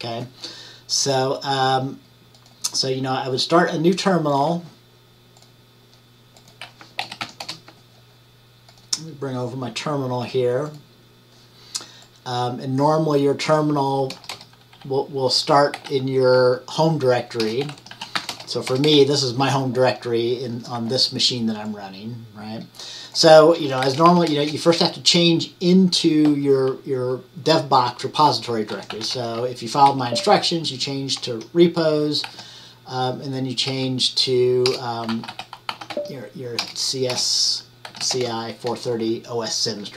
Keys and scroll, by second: 6.9-7.8 typing, 17.3-18.7 typing, 23.7-24.9 typing, 28.6-32.4 typing, 33.8 typing, 35.0-38.7 typing.